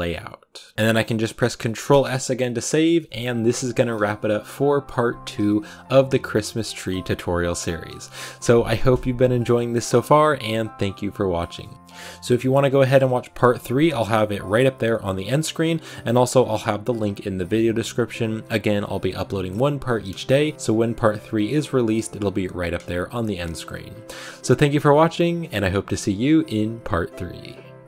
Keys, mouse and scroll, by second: 0.0 click, 0.7-1.7 shift+middle drag, 1.7 scroll up 1.